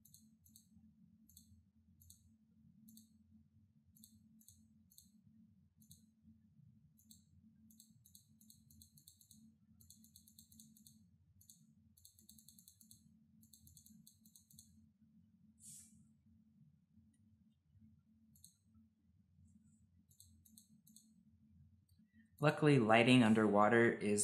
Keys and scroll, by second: 16.6 ctrl+alt+z, 16.8 ctrl+alt+z, 17.2 ctrl+alt+z, 23.8 ctrl+z.